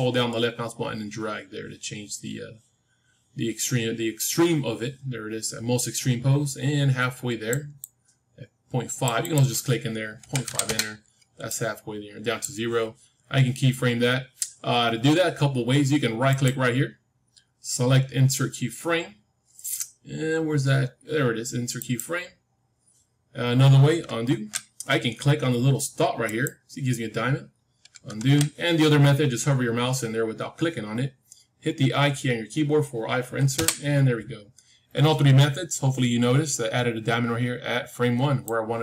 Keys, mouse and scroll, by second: 7.7-13.4 drag, 16.2-19.4 right drag, 24.2 ctrl+z, 26.2-28.2 drag, 28.1 ctrl+z, 33.5 i, 38.4-38.8 drag.